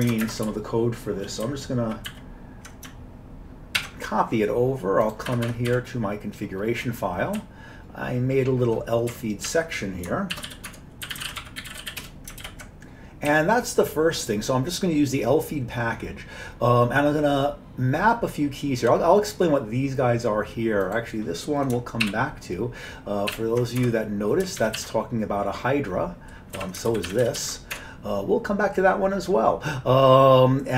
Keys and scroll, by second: 0.3 ctrl+shift+space, 0.5 ctrl+n, 1.0 ctrl+n, 3.8 alt+w, 5.3 Escape, 5.5 Escape, 5.7 c, 7.4-8.8 Down, 8.0 Down, 9.2 Tab, 9.5 Down, 10.1-12.5 typing, 13.3 Down, 22.1 ctrl+k, 23.4 ctrl+k, 23.8 Tab, 24.6 ctrl+x, 24.8 ctrl+s, 26.6 Down, 26.9 ctrl+k, 27.1 ctrl+k, 27.2 ctrl+x, 27.4 ctrl+s, 27.8 Tab.